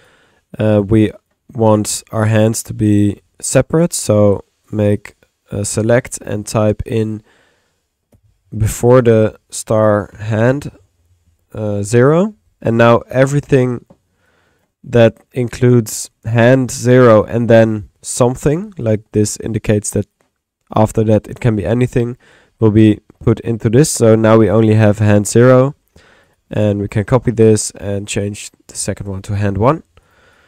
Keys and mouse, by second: 0.7 click, 2.0-3.1 drag, 2.6 Tab, 3.1 typing, 4.1 click, 4.7 click, 7.0 ctrl+click, 13.5 middle click, 14.3 click, 18.0-19.2 drag, 21.5 middle click, 22.4-23.4 drag, 22.9-24.0 middle drag, 25.4-26.6 drag, 26.8-27.6 typing, 27.4 ctrl+click, 28.4 ctrl+click, 30.3 click.